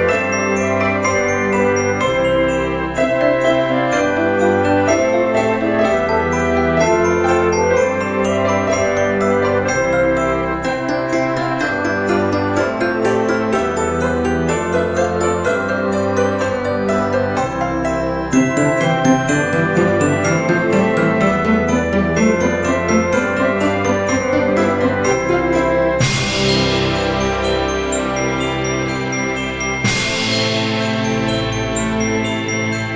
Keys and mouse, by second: 0.1 y, 1.4 z, 3.0 click, 3.6 middle click, 5.2 shift+middle click, 5.8 shift+d, 6.2 x, 7.0 y, 8.1 click, 8.7 z, 9.1 right click, 11.0 shift+middle click, 11.4 click, 12.3 g, 12.8 click, 13.7 shift+click, 14.1 s, 14.7 z, 15.2 click, 15.3 s, 16.4 click, 16.7 g, 17.2 z, 17.3 click, 18.3 shift+middle click, 19.2 s, 19.7 click, 20.0 z, 21.5 click, 21.8 s, 22.2 click, 22.9 y, 23.2 click, 23.5 z, 24.2 click, 25.7 middle click, 26.3 shift+middle click, 26.9 click, 27.5 shift+click, 28.1 shift+middle click, 29.0 shift+click, 30.1 shift+d, 30.8 x, 31.2 y, 31.9 click, 32.4 s, 32.8 click.